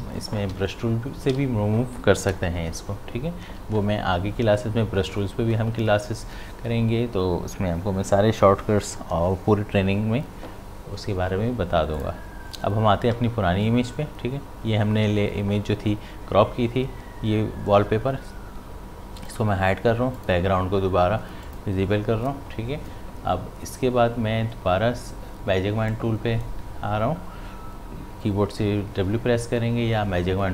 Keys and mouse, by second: 0.0-1.3 typing, 3.4 typing, 12.0 click, 19.3 click, 25.9-28.7 drag.